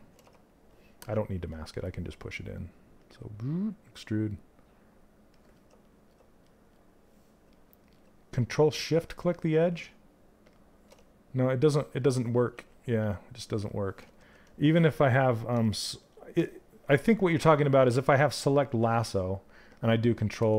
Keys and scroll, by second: 12.1 ctrl+z, 14.1 ctrl+z.